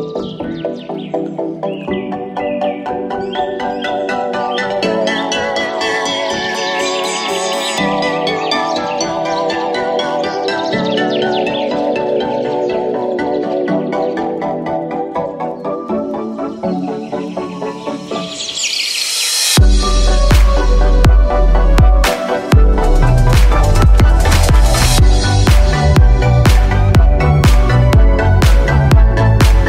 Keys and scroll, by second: 19.3 super+z.